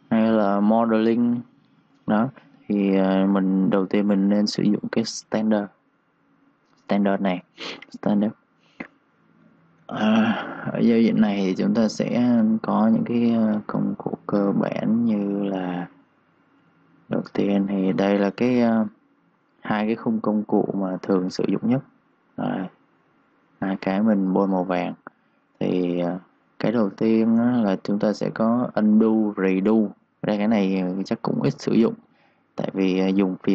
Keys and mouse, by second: 9.8 click, 14.3 ctrl+shift+Num_Lock, 14.4 ctrl+shift+d, 32.3 Escape.